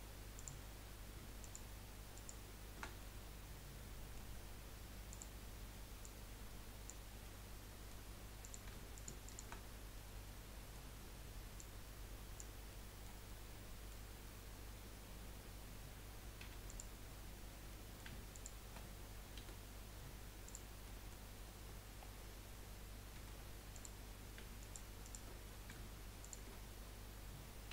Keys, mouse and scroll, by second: 1.4 alt+shift+click, 2.3 alt+shift+click, 3.0-5.1 middle drag, 5.1 click, 6.0 click, 7.2-8.4 middle drag, 8.4 click, 8.9 alt+shift+click, 9.2 alt+shift+click, 9.9-11.5 middle drag, 11.5 click, 12.7-15.3 middle drag, 15.3-16.2 scroll up 1, 16.4 3, 16.7 click, 17.7 scroll down 1, 17.8 middle click, 18.3 shift+click, 19.4 Delete, 20.8 middle click, 21.2-22.0 scroll up 3, 22.0 scroll down 1, 23.7 click, 24.6 alt+shift+click, 25.0 alt+shift+click, 25.4 middle click, 26.2 alt+shift+click.